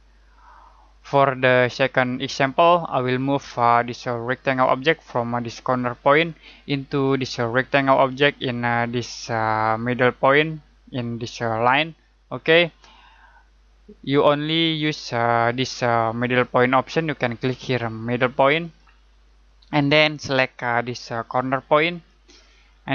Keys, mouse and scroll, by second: 18.6 click, 21.9 click.